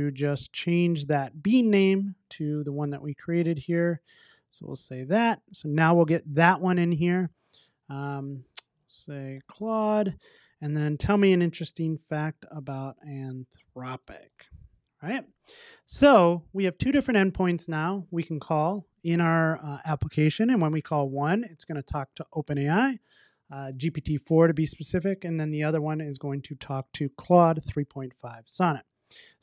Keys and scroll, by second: 1.2 Return, 1.4 super+c, 14.8 super+s, 28.9 super+s.